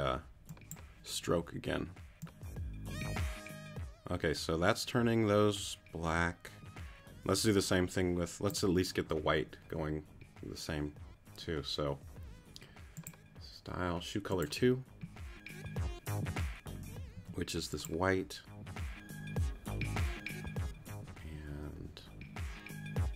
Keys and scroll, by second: 17.1 q.